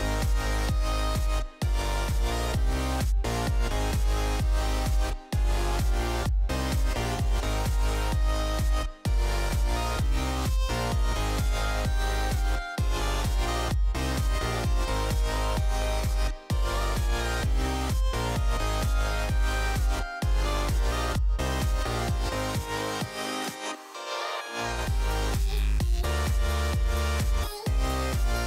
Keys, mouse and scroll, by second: 0.0 middle click, 0.3 z, 1.4 a, 2.4 right click, 3.3 shift+d, 8.0 middle click, 8.9 z, 9.3 Tab, 10.3-13.4 typing, 14.4 Tab, 15.7 z, 23.5 h, 26.0-28.4 drag.